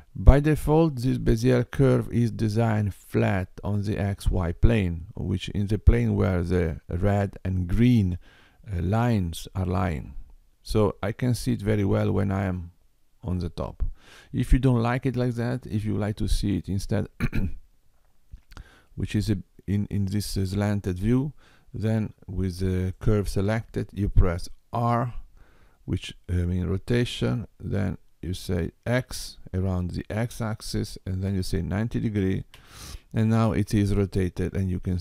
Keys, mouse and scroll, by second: 12.2 middle click, 19.1 middle click, 23.0 click, 24.9 r, 33.7 middle click.